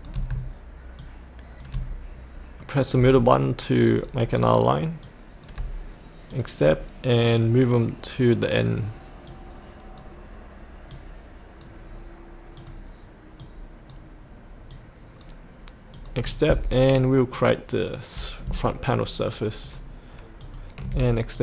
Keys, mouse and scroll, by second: 1.0 shift+click, 2.6 middle click, 3.6 shift+click, 5.0 shift+click, 6.3-16.0 drag, 18.6 ctrl+click, 19.6 ctrl+click, 21.3 click.